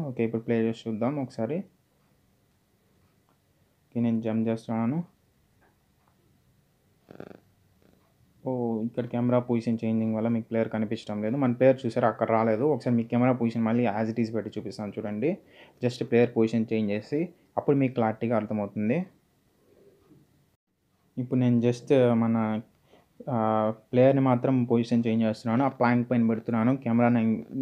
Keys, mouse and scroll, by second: 1.2 click, 4.9-6.1 typing, 7.5 typing, 10.6-11.4 typing, 12.5 click, 14.0 z, 15.5 z, 17.0 ctrl+Num_Lock, 17.3 z, 19.1 click, 20.8 click, 23.2 click.